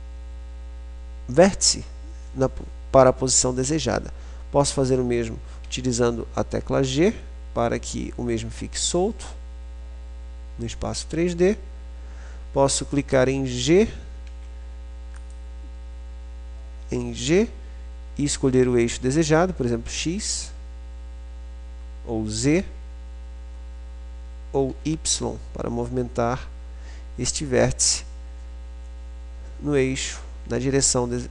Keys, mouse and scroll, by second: 5.9 g, 15.6-17.4 drag, 17.4 g.